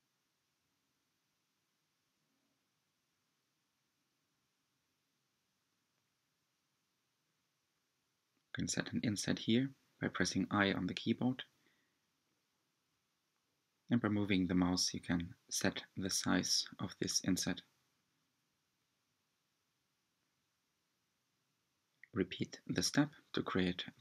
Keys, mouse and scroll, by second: 0.7 3, 1.0 click, 2.6 i, 10.5 g, 15.8 i, 19.1 g, 21.6 Tab, 22.5 Tab, 23.7 Tab.